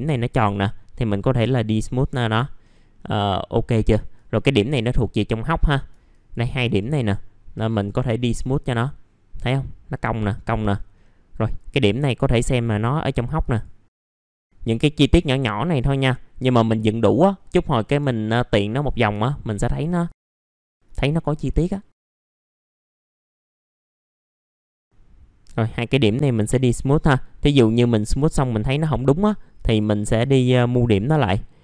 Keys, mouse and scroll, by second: 0.3 right click, 1.3 click, 1.9 middle click, 2.3-2.7 scroll down 1, 2.7 middle click, 4.1 click, 6.1 ctrl+click, 6.6 right click, 7.7 click, 10.1 middle click, 11.0-11.5 scroll up 1, 11.5 click, 14.2 right click, 15.1 click, 16.9-17.3 scroll down 1, 18.5 middle click, 19.6-19.9 scroll up 1, 19.9 click, 20.1 ctrl+click, 20.3 middle click, 20.7 click, 21.9 middle click, 22.3-22.8 scroll up 1, 22.8 click, 23.7 middle click, 24.2 click, 24.5 ctrl+click, 24.7 right click, 25.4-28.5 drag, 28.9 middle click, 29.5 click.